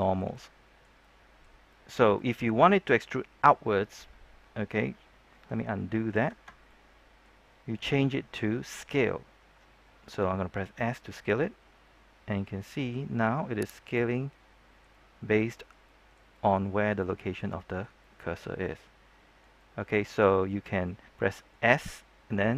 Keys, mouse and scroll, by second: 6.6 ctrl+z, 6.6 middle click, 10.7 s, 13.8 click, 14.0-15.8 middle drag, 16.7 scroll up 1, 16.9 middle click, 18.5 scroll down 1, 18.7-20.6 middle drag, 21.7 middle click.